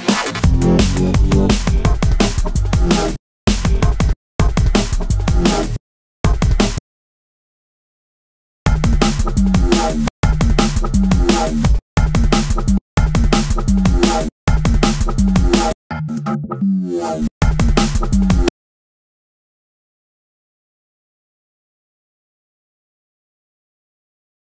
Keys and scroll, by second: 2.5 space, 4.6 space, 4.8 super+e, 5.1 super+space, 9.4 space, 11.1 space, 13.6 space, 15.0 space, 16.6 space.